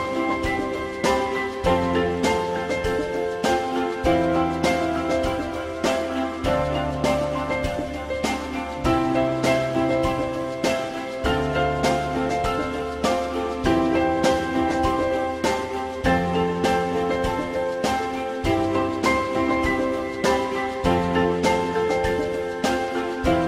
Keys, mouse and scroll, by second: 0.2 alt+middle click, 4.0 alt+middle click, 6.9 alt+middle click, 10.4 j, 11.4 alt+middle click, 22.2 click.